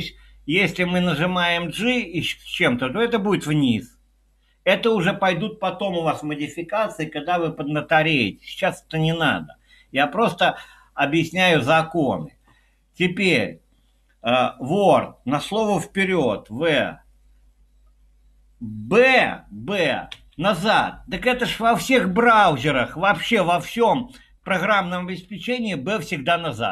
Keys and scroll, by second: 16.7 w, 20.1 b, 22.8 typing.